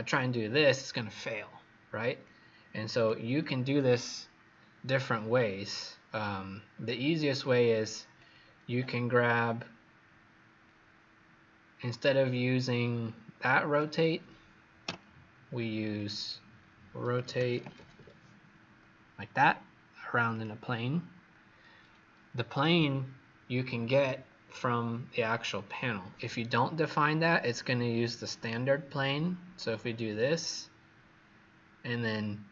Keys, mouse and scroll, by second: 5.2-5.5 scroll down 3, 6.6-8.3 scroll up 2, 8.3-9.5 scroll down 1, 9.5-10.9 scroll up 2, 12.4-13.6 scroll down 2, 13.6 click, 14.8 Delete, 15.9 click, 16.1 click, 16.9-18.4 typing, 20.2 click, 26.8-27.4 scroll down 2, 27.4 scroll up 1, 28.4 click.